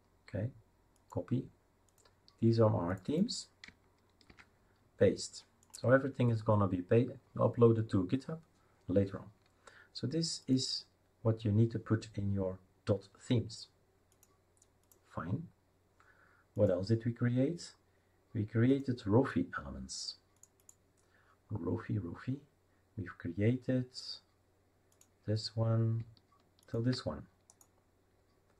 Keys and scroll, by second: 4.3 ctrl+v.